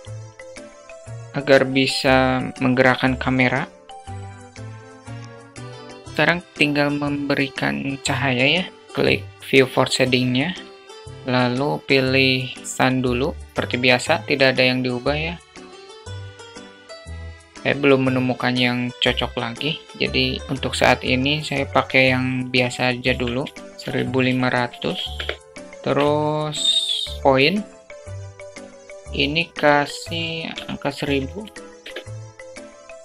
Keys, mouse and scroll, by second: 1.4-2.5 alt+middle drag, 4.1 click, 4.5 2, 4.6 Tab, 4.9 click, 5.0 Tab, 5.4 click, 5.7 q, 10.7 click, 11.4 shift+a, 14.1-15.8 drag, 16.2 ctrl+z, 16.7 click, 17.1 middle click, 17.5-18.1 drag, 19.2 click, 20.4 shift+t, 21.9 click, 23.8-25.7 drag, 25.7 0, 26.3 shift+a, 28.3-29.7 drag, 31.1-32.6 drag, 32.3 0, 32.8 click.